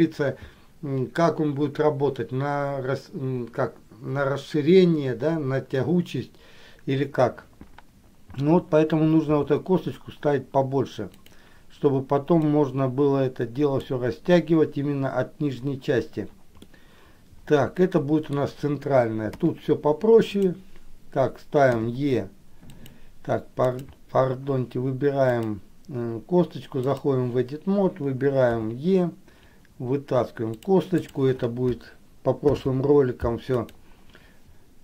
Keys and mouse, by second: 12.8-14.1 drag, 16.9-18.6 middle drag, 19.5 KP_3, 20.5 click, 21.9 e, 22.9 click, 23.9 click, 25.5-27.4 drag, 31.2 click, 32.7 alt+p.